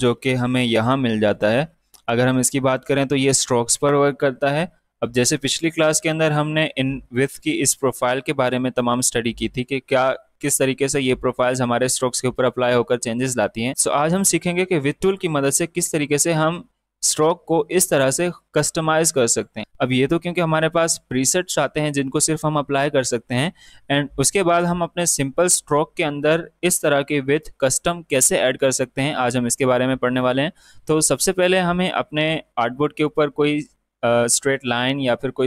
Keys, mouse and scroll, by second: 1.5 typing, 7.1 click, 29.8-34.9 drag.